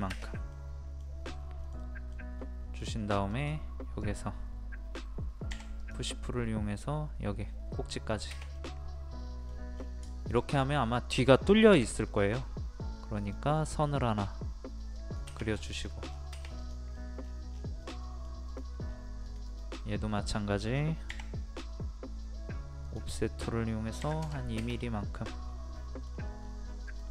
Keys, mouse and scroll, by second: 0.5 middle click, 1.3 scroll up 1, 1.6 middle click, 2.3 scroll up 1, 3.3 click, 5.5 p, 5.8 click, 8.6 middle click, 9.5 scroll down 1, 10.1 shift+middle click, 11.8 l, 12.4 scroll up 1, 13.2 click, 15.5 scroll down 1, 15.6 scroll up 1, 15.8 scroll down 1, 16.2-16.6 scroll up 1, 16.6 click, 16.9 middle click, 17.2-17.5 scroll down 1, 17.5 scroll up 1, 17.8 middle click, 18.5 click, 18.9 scroll up 1, 19.2 click, 21.1-22.8 scroll up 1, 22.8 click, 24.0 KP_2, 25.1 scroll up 1, 25.7 middle click, 26.4-26.9 scroll up 1, 26.9 click.